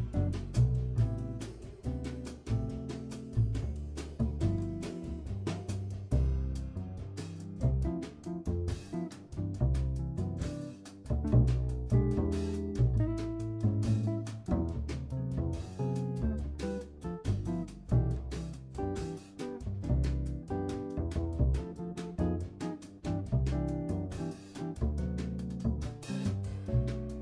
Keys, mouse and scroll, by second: 0.5 0, 3.7 Left, 5.8-6.4 middle drag, 6.4-6.7 scroll down 3, 6.7 KP_1, 7.6 scroll up 2, 7.7 shift+middle click, 8.1 click, 8.4 r, 9.4 scroll down 1, 9.6-11.1 middle drag, 11.4-11.9 scroll down 2, 11.9-12.6 shift+middle drag, 12.6 shift+click, 13.6 a, 19.4-22.5 drag, 24.5 click, 26.0 click.